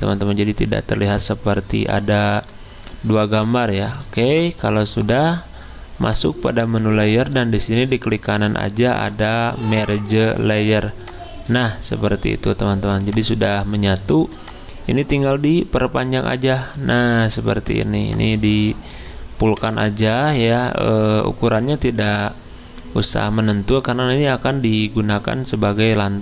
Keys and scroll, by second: 19.6 Return.